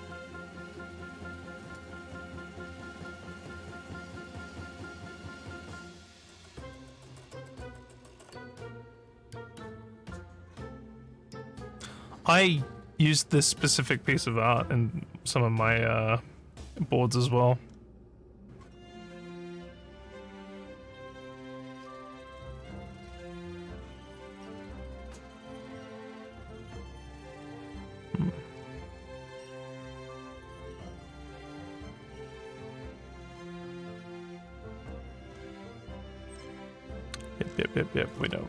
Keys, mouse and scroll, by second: 0.4 scroll down 1, 1.5 scroll up 1, 9.6 scroll down 1, 10.2 scroll down 1, 17.6 scroll down 1, 18.1 scroll down 1, 18.2 scroll down 1, 21.3 scroll down 1, 24.9-26.0 scroll up 3, 26.0 scroll down 1, 27.4 scroll up 1, 28.5 scroll down 2, 32.9 scroll up 1, 34.6-35.3 scroll down 4, 35.9 scroll down 1, 36.7 scroll down 1, 37.4 scroll down 1, 38.1 scroll down 1.